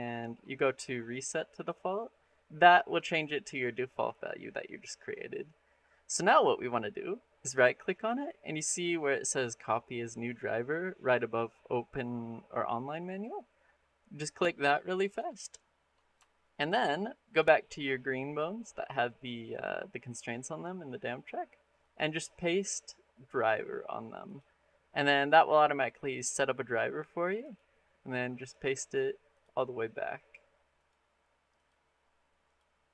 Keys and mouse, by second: 7.2-15.0 drag, 16.1-16.5 shift+middle drag, 19.4 click, 21.6-24.2 drag, 25.9 click, 27.2-28.4 drag, 30.6 click, 32.3 click.